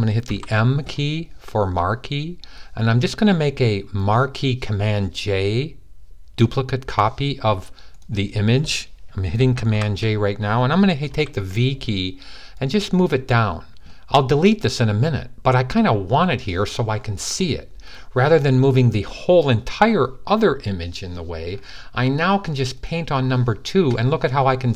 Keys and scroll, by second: 0.1 m, 9.5 super+j, 10.8 super+v.